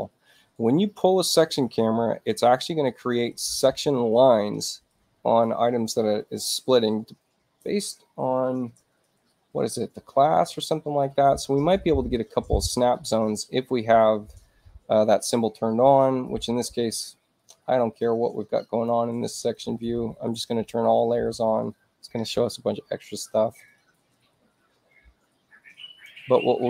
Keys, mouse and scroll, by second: 16.8 click, 18.6 click.